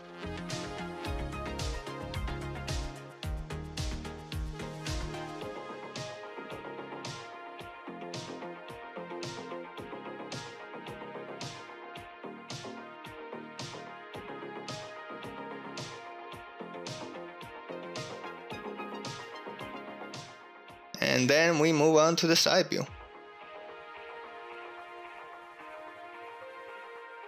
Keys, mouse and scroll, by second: 0.0-20.2 typing, 6.3 click, 9.2 alt+z, 9.4 alt+z, 10.5 click, 11.0 Return, 11.6 alt+z, 12.3 alt+z, 13.1 Return, 14.0 alt+z, 16.4 shift+click, 17.5 ctrl+click, 17.6 ctrl+click, 20.5 ctrl+z, 20.6 ctrl+z, 20.7 ctrl+z, 21.0 ctrl+click, 21.2 ctrl+click, 21.3 middle click, 21.6 ctrl+click, 21.7 middle click, 21.7 ctrl+click, 21.9 KP_Enter, 21.9 KP_3, 22.1 KP_1, 22.2 alt+z, 22.5 KP_7, 22.7 ctrl+shift+middle click, 23.0 shift+middle click, 23.1 alt+z, 23.2 middle click, 23.4 middle click, 24.1 shift+click, 24.4 alt+2, 24.5 click, 24.6-27.2 typing, 25.1 shift+click, 25.9 click, 26.0 shift+click, 26.3 click, 26.3 middle click, 26.9 middle click, 27.0 click, 27.1 shift+click.